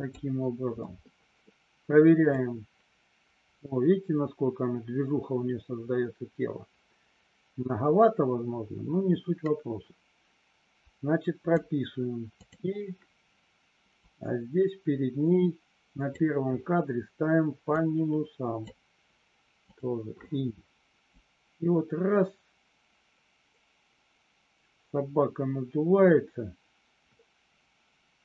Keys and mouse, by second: 2.4-11.5 drag, 12.4 click, 14.0-16.2 drag, 17.6 click, 21.1-28.2 drag.